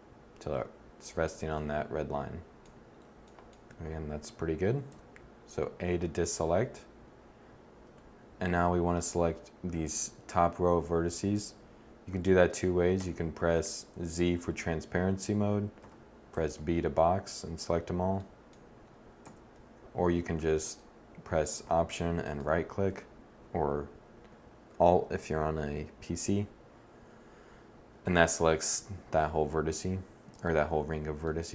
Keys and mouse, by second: 4.7 a, 7.7 1, 12.8 a, 13.4 a, 13.7 z, 15.6 b, 19.2 z, 19.5 a, 28.6 KP_1.